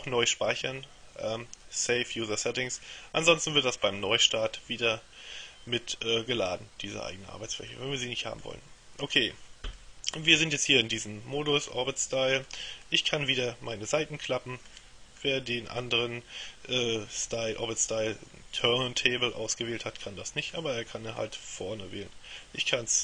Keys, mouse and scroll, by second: 7.8-9.0 middle drag, 9.8-13.0 middle drag, 15.3-21.1 middle drag, 21.3-23.0 middle drag.